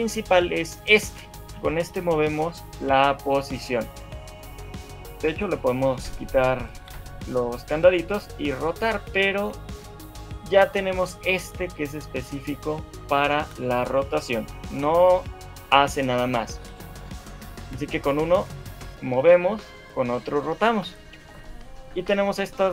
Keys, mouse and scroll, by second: 0.7 click, 1.3 shift+middle click, 1.9 g, 4.1 middle click, 7.1 click, 8.3 click, 9.7 shift+middle click, 10.9 click, 13.5 r, 15.3 middle click, 17.2 shift+middle click, 17.6 middle click, 18.4 click, 19.2 middle click, 20.0 click, 21.4 middle click, 22.2 click.